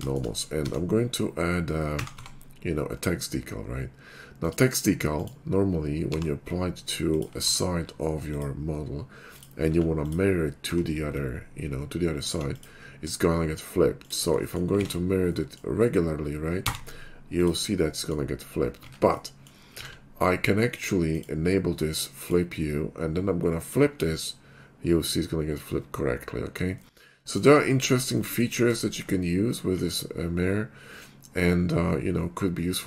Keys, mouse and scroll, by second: 0.0 shift+middle drag, 0.4 middle click, 0.6 d, 4.4 click, 5.1 click, 6.2 g, 7.1 ctrl+click, 7.5 d, 8.3 click, 8.7 middle click, 9.4 click, 9.7 s, 10.1 click, 10.7 d, 12.2 alt+click, 12.6 alt+click, 13.0-13.6 middle drag, 14.0 shift+click, 14.5 middle click, 14.9 alt+x, 15.3 middle click, 16.6 x, 17.4 click, 18.0 middle click, 18.8 ctrl+z, 19.3 middle click, 19.9 alt+x, 21.1 click, 22.2 click, 23.6 click, 24.1 middle click, 27.7-28.2 shift+middle drag, 28.3 middle click, 28.9 shift+middle click, 30.4-31.9 middle drag, 32.7 middle click.